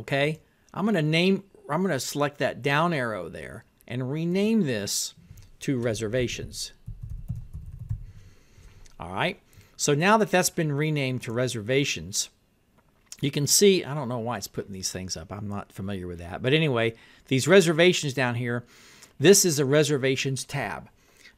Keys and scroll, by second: 6.0-8.5 typing.